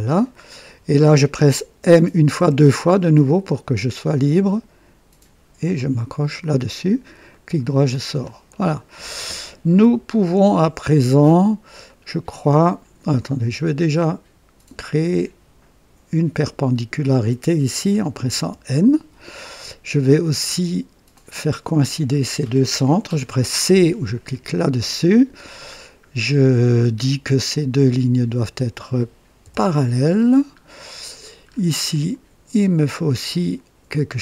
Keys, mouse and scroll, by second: 1.7-2.8 typing, 6.0 click, 7.2 right click, 7.9 scroll up 2, 8.4-9.3 right drag, 10.0 scroll up 2, 11.0 right click, 11.8 right click, 13.6 click, 14.7 click, 18.3 typing, 21.0-22.3 drag, 24.2 typing, 25.7-26.0 scroll down 1, 26.2-26.9 right drag, 27.7 click, 28.7 click, 29.4 typing, 30.1-30.5 scroll down 1, 30.7 right click, 31.4 scroll up 1, 31.8 right click, 33.2 click.